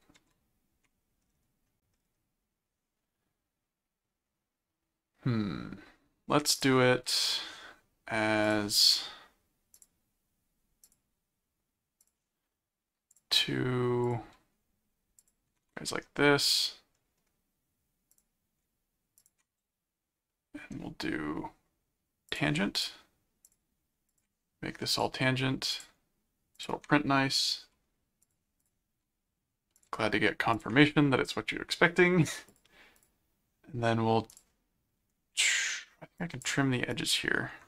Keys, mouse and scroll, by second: 0.2 ctrl+1, 6.5 click, 8.4 click, 9.7 click, 10.8 click, 12.0 click, 13.1 click, 14.0 click, 15.2 click, 18.1 click, 19.2 ctrl+click, 22.3 click, 23.4 ctrl+click, 24.1 ctrl+click, 24.9 click, 25.7 ctrl+click, 26.5 ctrl+click, 28.2 click, 29.8 ctrl+click, 30.5 ctrl+click, 32.5 click, 34.3 click, 36.2 click, 36.9 click.